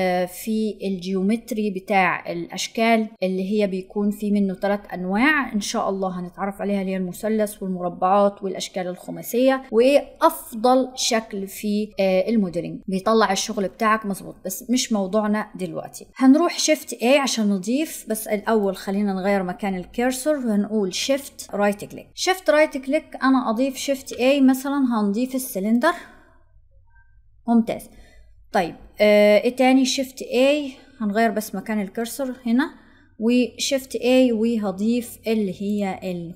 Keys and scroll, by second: 16.5 shift+a.